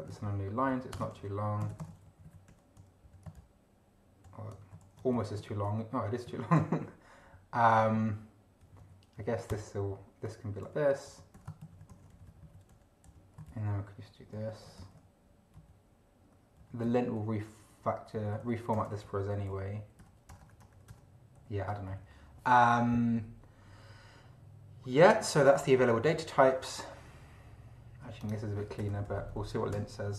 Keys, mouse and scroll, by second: 0.1 ctrl+shift+Up, 0.7 ctrl+shift+End, 0.9 ctrl+shift+Return, 1.1 ctrl+shift+v, 1.6 ctrl+shift+space, 1.7 ctrl+shift+=, 1.8 ctrl+shift+space, 2.0 ctrl+shift+Down, 2.5 ctrl+shift+End, 3.0 ctrl+shift+Left, 4.5 ctrl+shift+Right, 4.8 ctrl+shift+c, 5.0 ctrl+shift+Up, 5.4 ctrl+shift+v, 6.6 ctrl+Left, 7.8 ctrl+Right, 8.6 ctrl+Right, 9.5 ctrl+Return, 10.3 End, 10.6 Home, 11.0 Up, 11.3 Home, 11.6 ctrl+shift+Right, 11.9 ctrl+shift+c, 12.1 ctrl+shift+Down, 12.7 ctrl+shift+End, 13.0 ctrl+shift+Left, 14.7 ctrl+shift+v, 15.6 Down, 16.6 Down, 16.8 Up, 18.2 Up, 18.4 Home, 18.7 BackSpace, 19.5 Down, 20.0 Home, 20.3 BackSpace, 20.9 Return, 21.4 End, 21.9 Down, 25.8 Up, 28.2 click, 28.8 Return, 29.0 Down, 29.3 End, 29.5 Home, 29.7 BackSpace.